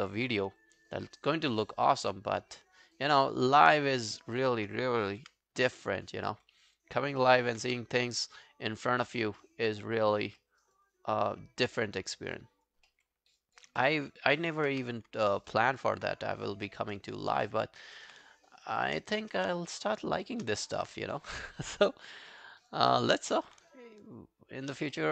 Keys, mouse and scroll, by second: 0.3 scroll down 2, 0.6 alt+click, 1.1 alt+middle click, 1.3 alt+right click, 3.3 alt+click, 4.4 shift+click, 5.5-5.8 scroll down 2, 5.5 g, 5.8 alt+click, 6.3 alt+middle click, 6.6 alt+scroll down 1, 6.8 alt+click, 7.2 alt+middle click, 7.4 alt+right click, 7.7 w, 7.9 right click, 9.0 scroll down 1, 9.4 alt+middle click, 10.2 scroll down 1, 10.4 alt+middle click, 10.6 alt+right click, 10.9 alt+click, 12.2 alt+right click, 12.5 alt+click, 12.9 alt+middle click, 13.2 alt+scroll down 1, 13.4 alt+click, 13.8 alt+middle click, 14.0 alt+right click, 14.2 alt+click, 14.7 q, 15.3 alt+middle click, 15.5 alt+right click, 15.7 alt+click, 16.1 right click, 17.4 double click, 17.7 alt+click, 18.6 shift+click, 18.7 shift+click, 19.1 alt+click, 20.1 shift+click, 20.3 shift+click, 20.6 alt+click, 21.1 shift+click, 21.3 shift+click, 21.6 alt+click, 21.8 alt+right click, 22.2 alt+middle click, 22.4 alt+right click, 22.5 alt+click, 22.9 alt+middle click, 23.1 alt+right click, 23.3 alt+click, 23.7 shift+right click, 25.0 alt+middle click.